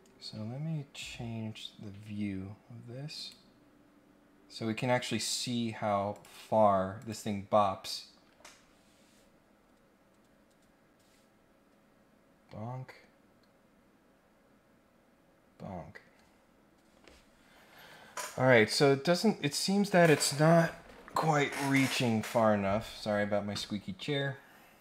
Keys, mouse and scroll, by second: 0.4-0.8 scroll down 2, 0.8 scroll up 1, 1.6-2.2 scroll up 3, 3.1 right click, 6.1 click, 7.0 click.